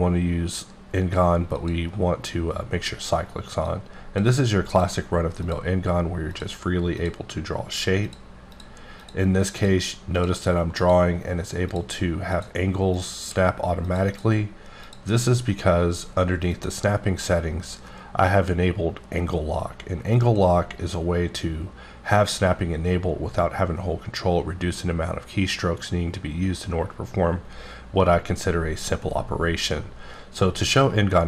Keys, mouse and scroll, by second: 1.5 click, 3.7 click, 4.7 click, 5.2 click, 6.3 click, 7.0 click, 7.1 click, 8.4 click, 9.0 click, 9.6 click, 10.2 click, 10.8 click, 12.3 click, 12.9 click, 14.1 double click, 14.8 click, 17.8 click.